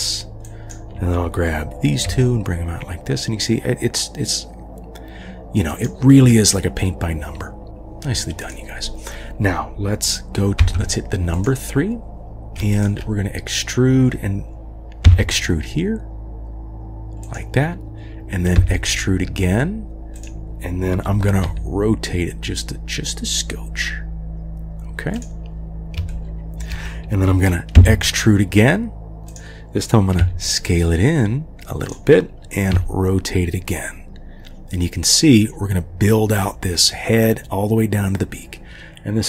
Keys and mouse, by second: 0.6 click, 2.0 g, 8.4 click, 10.6 3, 11.3 click, 12.7 shift+click, 15.1 e, 18.6 e, 21.4 r, 26.1-26.7 shift+drag, 27.8 e, 30.2 s, 32.7 r.